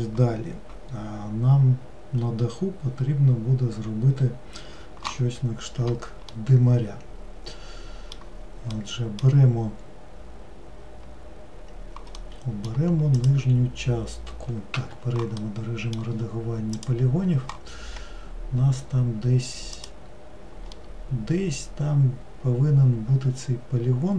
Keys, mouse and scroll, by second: 6.4-12.0 middle drag, 12.3-13.3 middle drag, 13.3 click, 14.9 Tab, 15.5-16.9 middle drag, 16.9-18.0 drag, 18.0-19.9 scroll up 2, 19.9 click, 20.9-23.9 middle drag.